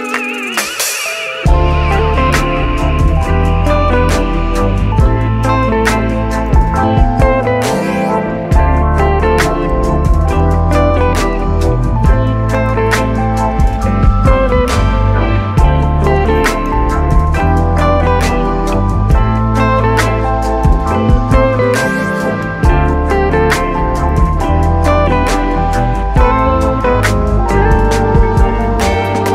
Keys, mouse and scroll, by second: 2.9 Tab, 3.6 ctrl+2, 4.7 click, 5.0-5.6 scroll up 1, 5.6 Tab, 8.0-9.8 middle drag, 9.8 alt+z, 10.3-11.9 middle drag, 11.9 shift+click, 12.8 z, 13.0-14.9 middle drag, 14.9 shift+click, 15.4-16.8 middle drag, 18.8 alt+z, 19.1 middle click, 19.7 Tab, 20.3-21.6 right drag, 21.6-22.3 scroll up 1, 22.3-23.0 scroll up 1, 23.0 shift+d, 26.5 click, 26.7 scroll down 2, 26.8-27.6 middle drag, 27.6 click, 27.8 shift+drag, 29.1 middle click.